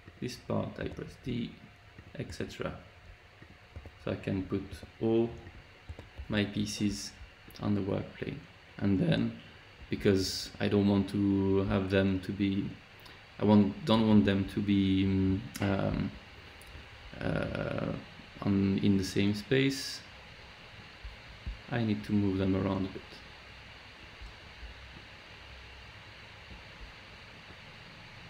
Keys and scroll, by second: 0.8 d, 2.2 d, 3.7 d, 4.7 d, 5.8 d.